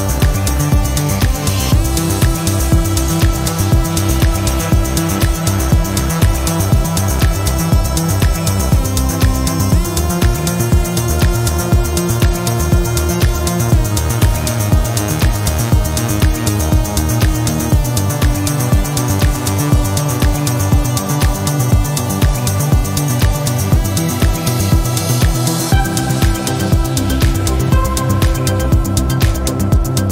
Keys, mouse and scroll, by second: 2.1 click, 3.3-5.1 drag, 5.8-6.2 scroll up 2, 7.0 click, 7.8-8.2 scroll down 2, 9.0 click, 10.8 click, 12.0-13.3 drag, 14.0 click, 15.0 click, 16.8 click, 17.4-18.0 scroll down 2, 18.1-18.5 scroll up 2, 19.8-21.1 drag, 22.1 click, 23.4 click, 25.6 click, 27.1 click, 28.9-30.1 drag.